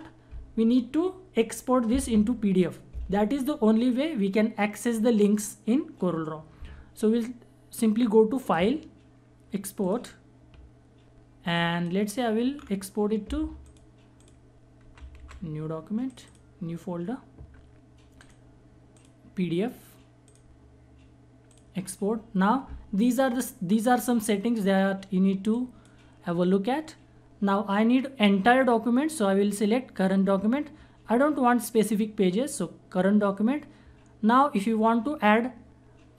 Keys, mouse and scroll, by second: 7.9 click, 8.0 click, 12.1-13.2 scroll down 1, 13.2 click, 14.4-14.8 typing, 15.6 click, 25.0 click, 25.1-28.1 drag.